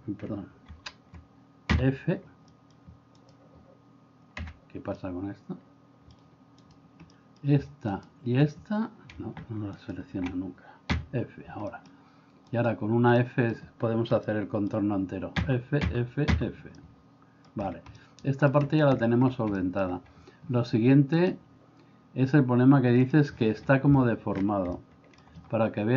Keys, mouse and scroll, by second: 0.7 ctrl+z, 1.7 f, 2.5 middle click, 5.1-6.2 middle drag, 7.2 middle click, 11.7 middle click, 13.1 middle click, 14.3 middle click, 16.8-17.5 middle drag, 18.1 middle click, 19.7 middle click, 21.2-23.4 drag, 24.8 shift+middle click.